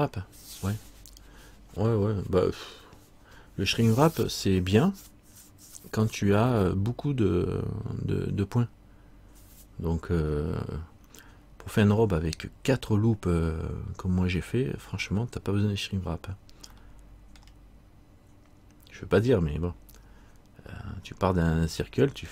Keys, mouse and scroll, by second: 11.5 scroll down 1, 17.6 middle click.